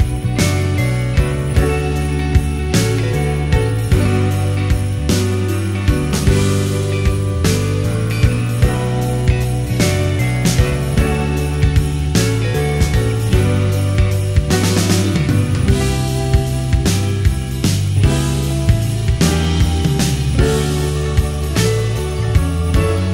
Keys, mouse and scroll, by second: 5.0-5.7 middle drag, 6.5-8.0 middle drag, 8.7-9.2 middle drag, 9.5 shift+middle click, 10.9-19.0 drag, 22.5 5.